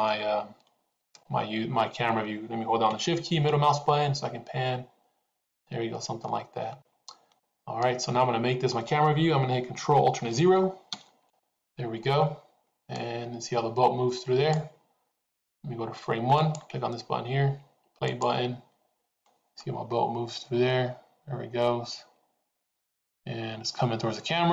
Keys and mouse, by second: 3.4-5.6 shift+middle drag, 6.2-8.8 middle drag, 10.9 ctrl+alt+KP_0, 14.0-14.8 drag, 16.3 click, 18.2 click.